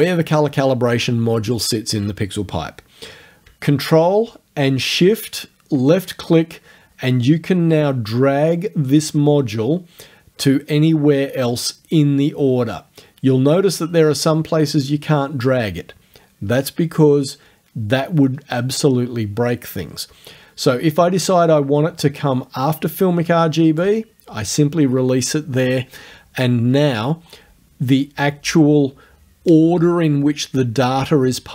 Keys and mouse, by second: 0.0 click, 1.5 click, 5.2-24.0 ctrl+shift+drag.